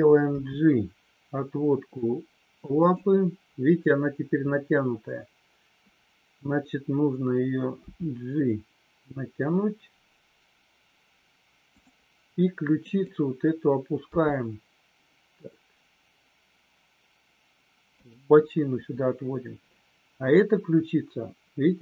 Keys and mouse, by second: 0.2 g, 7.8 g, 12.7 click, 14.0 g, 18.0 click.